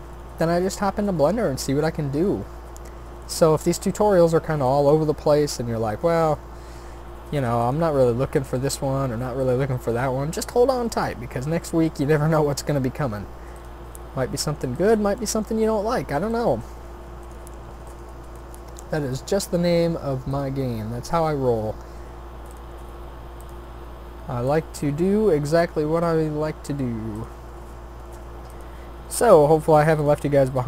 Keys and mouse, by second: 0.0 s, 0.9 e, 3.5 e, 4.9 s, 6.2 e, 7.8 s, 9.7 g, 10.8 e, 12.2 s, 13.8 g, 16.6 g, 18.4 shift+d, 19.4 r, 20.8 e, 22.7 s, 23.7 e, 25.4 e, 27.5 s, 29.0 e, 30.3 s.